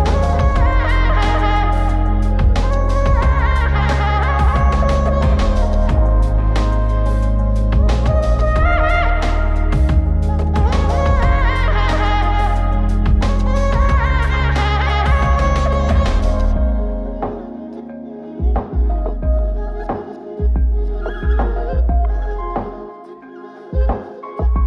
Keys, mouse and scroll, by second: 0.3 ctrl+shift+click, 1.9 ctrl+shift+click, 5.0-5.9 drag, 7.5 click, 10.4 click, 11.8 shift+a, 14.3-17.2 drag, 17.3 scroll up 1, 18.3 shift+a, 23.0-24.0 drag.